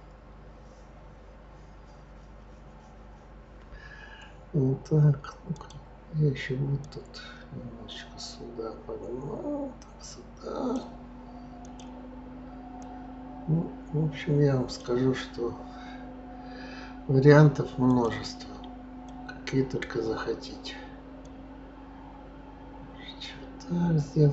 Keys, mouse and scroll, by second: 5.5 click, 6.8 click, 11.6 click, 12.8 click, 17.9 click, 19.0 click, 21.2 click.